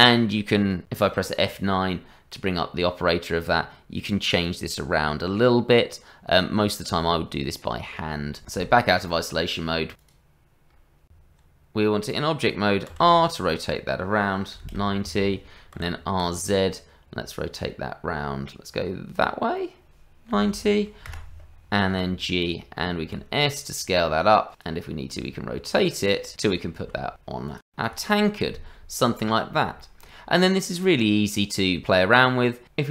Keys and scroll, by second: 11.1 Tab, 12.9 r, 15.7 r, 21.9 g, 23.1 s, 24.9-27.3 typing.